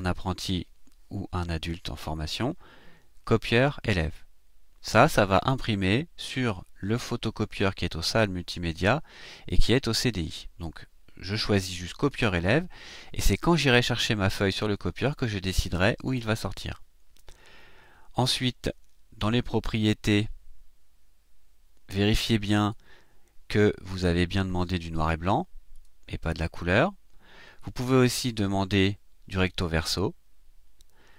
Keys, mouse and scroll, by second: 11.3 click, 19.7 click, 22.2-22.9 drag, 25.7 click, 26.6 click, 27.9 click.